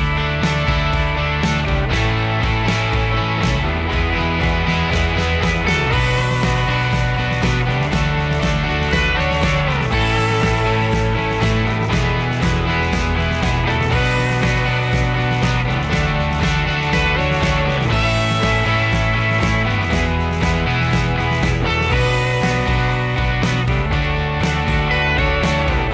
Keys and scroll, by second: 24.7 Escape, 25.5 typing.